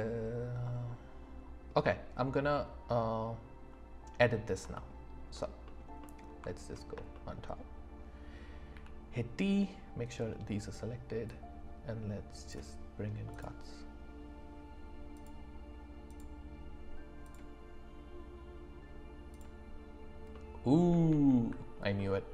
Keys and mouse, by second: 7.1 shift+click, 8.7 d, 11.3 click, 13.3 click, 15.1 click, 16.1 click, 17.2 click, 19.3 click, 20.3-20.8 middle drag, 21.1 ctrl+z, 22.0-22.3 drag.